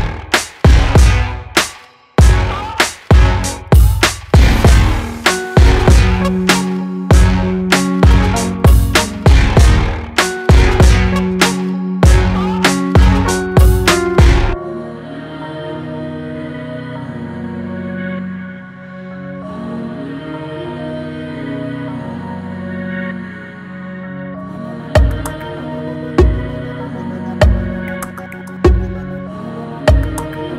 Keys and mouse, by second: 1.3 middle click, 3.6-5.2 shift+drag, 5.7 shift+click, 5.9 shift+middle click, 7.3 shift+click, 8.4 click, 11.7-12.5 drag, 25.7 click, 26.5 middle click, 27.1-30.5 drag.